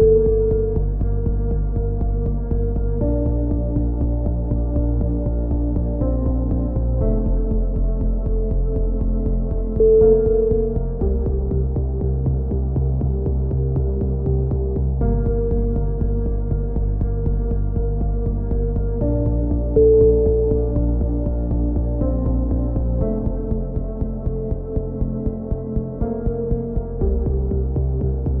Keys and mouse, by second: 0.3-1.3 right drag, 0.7 x, 1.6-4.2 right drag, 2.5 KP_3, 2.7 z, 5.0-6.3 right drag, 7.3 click, 8.0-10.0 middle drag, 10.0 r, 12.1-14.0 drag, 14.0 middle click, 14.3 a, 14.5 z, 14.7 middle click, 15.3 KP_7, 16.6-17.6 drag, 17.6 right click, 18.4 KP_1, 18.5 middle click, 19.0 z, 19.6 click, 23.5 a, 23.9 click, 25.0 z, 26.3 KP_1, 26.6-27.9 middle drag, 27.9-28.4 right drag.